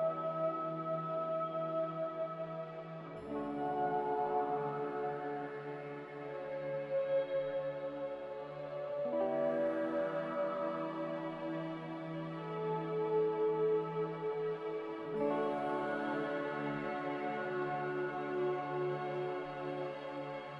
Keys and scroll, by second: 1.2 z, 3.5-4.5 typing, 8.1-8.9 typing, 17.6 z, 18.3 Escape.